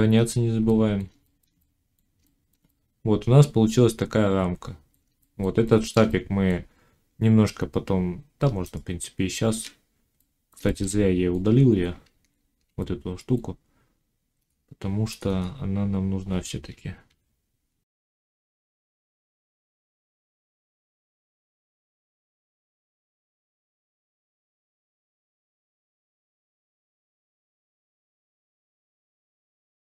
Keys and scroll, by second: 8.3 Tab, 12.0 ctrl+z, 18.9 z, 20.1 s, 21.7 ctrl+z, 22.0 s, 22.8 s, 25.4 z, 26.4 1, 26.9 ctrl+1, 27.1 z, 28.9 s, 29.2 x.